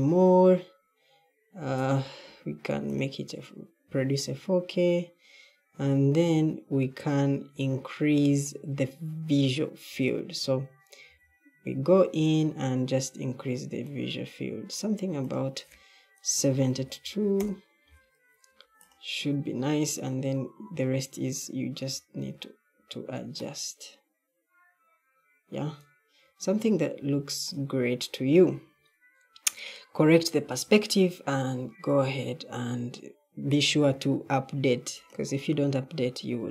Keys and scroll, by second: 11.0 w, 16.5-17.4 typing, 19.9-21.6 typing, 26.9 d.